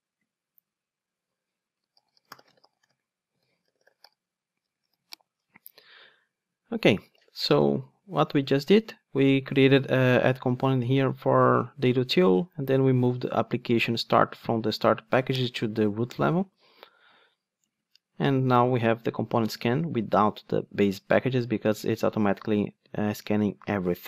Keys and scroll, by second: 4.8 alt+super+l.